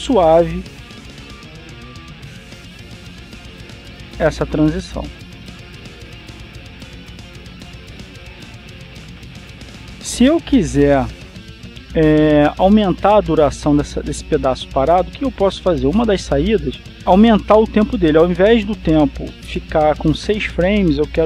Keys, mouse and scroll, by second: 0.9-5.6 drag, 5.6-6.8 scroll down 1, 6.8 click.